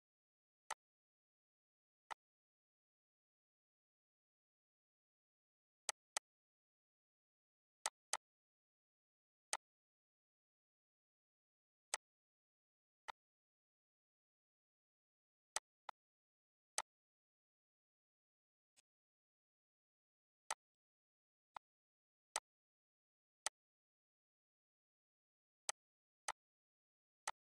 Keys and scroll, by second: 20.1 ctrl+z.